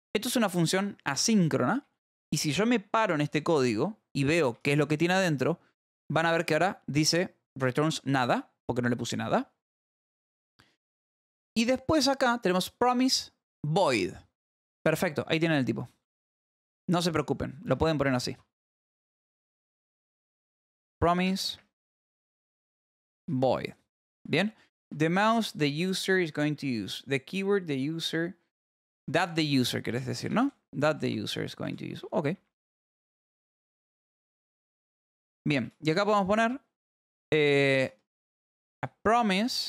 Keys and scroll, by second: 0.1 k, 1.5 l, 5.0 shift+k, 15.4 Escape, 15.5-18.0 typing, 19.0 Left, 19.3-23.5 typing, 23.9 Right, 24.1 Up, 24.6 Up, 24.8 Down, 25.4 Right, 25.7 Up, 26.1 Right, 27.9 Left, 28.8 Left, 29.0 Right, 29.8-31.6 typing, 31.0 Escape, 31.3 Down, 31.7 Left, 33.9-35.9 typing, 37.9-39.6 typing.